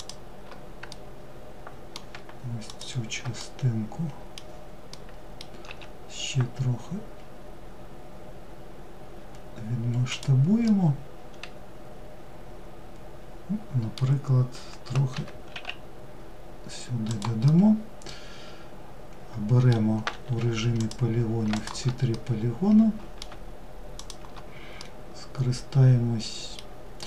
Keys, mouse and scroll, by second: 0.0-1.7 middle drag, 1.7 shift+click, 2.5-4.7 middle drag, 4.7 s, 9.7-12.8 middle drag, 16.5-19.4 middle drag, 19.4 3, 19.9 click, 20.6 shift+click, 21.2-23.0 middle drag, 23.0 shift+click, 23.9-26.9 middle drag, 26.9-27.0 scroll up 1.